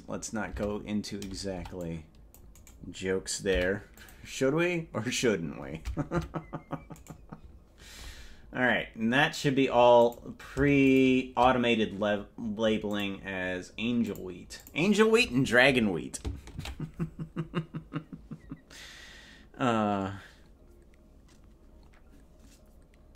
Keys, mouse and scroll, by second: 0.0 right click, 0.6 Tab, 1.6 c, 3.6 p, 6.4 Tab, 7.2 right click, 8.6-9.0 scroll down 5, 9.0 scroll up 3, 10.0 click, 10.9 shift+click, 12.9 click, 14.1 click, 14.6 click, 20.0 ctrl+s.